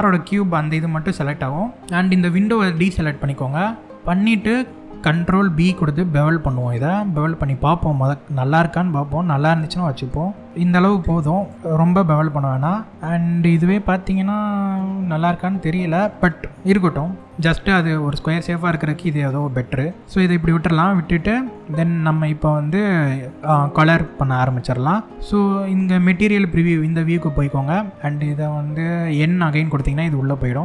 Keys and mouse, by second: 2.1 shift+click, 3.3-4.4 middle drag, 5.0 ctrl+b, 10.5 click, 11.9-13.2 middle drag, 13.7-15.7 middle drag, 16.8 middle click, 17.7 middle click, 20.4 middle click, 26.7 click, 29.4 n.